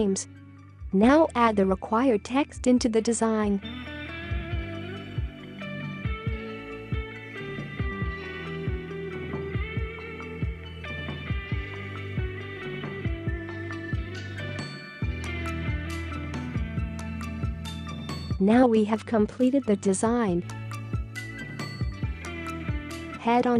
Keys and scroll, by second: 2.0 ctrl+c, 3.0 ctrl+v, 4.4 ctrl+c, 5.6 ctrl+v, 6.8 ctrl+c, 8.2 ctrl+v, 9.9 ctrl+c, 11.1 ctrl+v, 11.5 space, 11.8 space, 13.0 ctrl+c, 13.8 ctrl+v, 15.7 ctrl+c, 16.9 ctrl+v, 18.9 space, 19.5 space, 20.5 space.